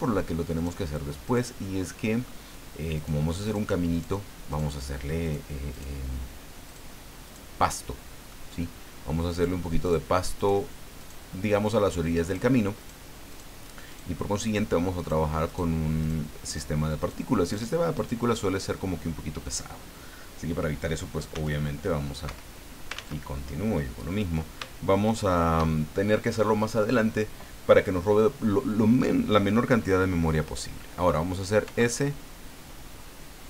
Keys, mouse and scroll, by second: 0.5 shift+right click, 1.2 shift+right click, 1.6 shift+middle click, 2.9 shift+right click, 3.4 shift+right click, 3.9 shift+right click, 4.5 shift+right click, 5.2 shift+right click, 5.7 shift+right click, 6.6 shift+right click, 7.2 shift+right click, 7.6 shift+middle click, 9.3 shift+right click, 9.8 shift+right click, 10.4 shift+right click, 11.0 shift+right click, 11.6 shift+right click, 12.2 shift+right click, 12.8 shift+right click, 13.3 shift+right click, 13.9 shift+right click, 14.4 shift+right click, 15.0 shift+right click, 15.4 shift+right click, 16.0 shift+right click, 16.5 shift+right click, 17.0 shift+right click, 17.4 shift+right click, 17.9 shift+right click, 21.3 s, 22.3 Escape, 22.9 ctrl+z, 25.1 shift+right click, 31.6 i.